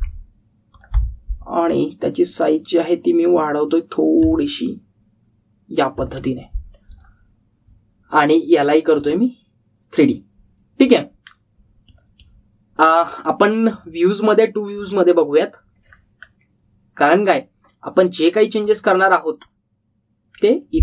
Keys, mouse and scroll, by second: 1.6 click, 2.6-3.9 scroll up 1, 5.1 click, 12.1-12.6 scroll down 1, 12.7-13.4 middle click, 13.7 click, 16.8-18.6 scroll down 1, 19.6 click, 20.4-20.8 scroll up 1.